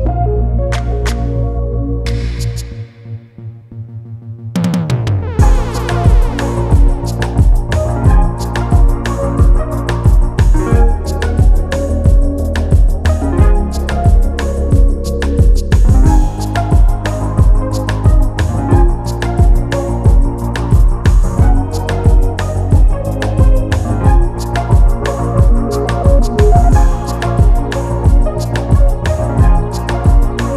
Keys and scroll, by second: 2.8 Return, 11.2 ctrl+t, 18.6 Return.